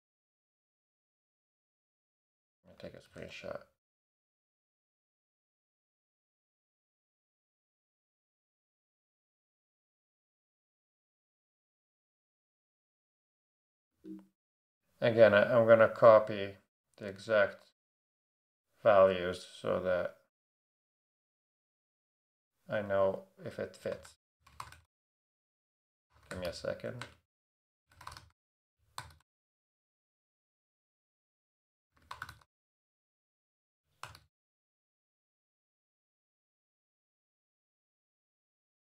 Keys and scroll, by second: 3.0 shift+super+4, 7.9-9.1 typing, 12.9 space, 13.9 Return, 22.7 Right, 23.4-38.8 typing.